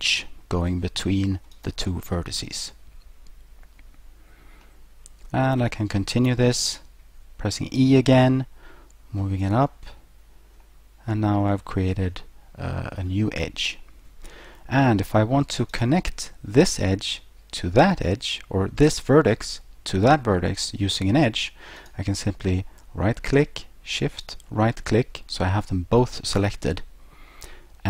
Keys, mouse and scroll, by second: 1.6 right click, 2.6 right click, 4.6 middle click, 6.6 e, 9.4 click, 10.6 middle click, 13.8 middle click, 15.7 right click, 21.8 right click, 24.2 shift+right click.